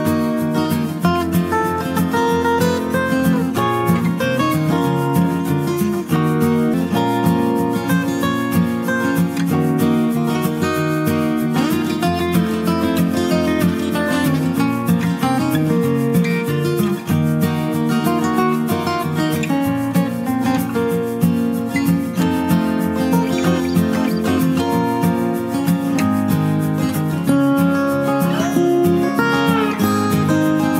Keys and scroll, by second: 27.0 ctrl+space, 29.7 ], 30.1 ], 30.4 ].